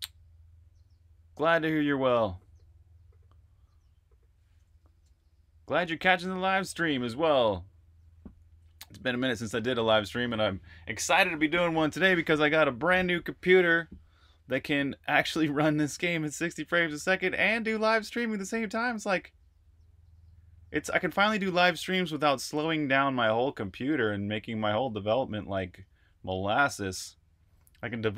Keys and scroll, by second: 4.9 Escape.